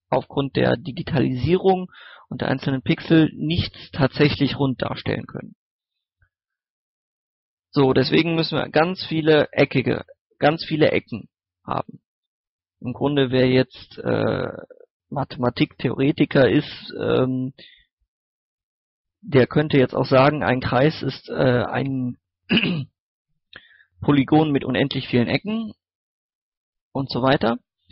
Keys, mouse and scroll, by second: 1.3 scroll up 1, 1.6 middle click, 2.4 scroll up 1, 6.7 scroll down 1, 7.0 scroll up 1, 7.3 shift+middle click, 8.7-27.9 drag.